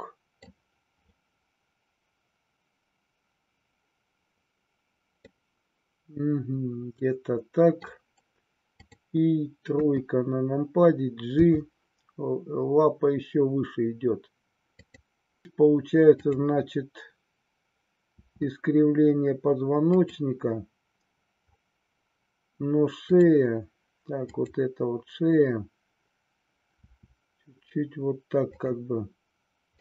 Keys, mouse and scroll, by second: 5.2-7.8 middle drag, 9.8 KP_3, 11.3 g, 14.8 click, 18.1 r, 20.0 click, 23.0-25.9 drag, 26.8 r, 28.6 click, 29.7-29.8 middle drag.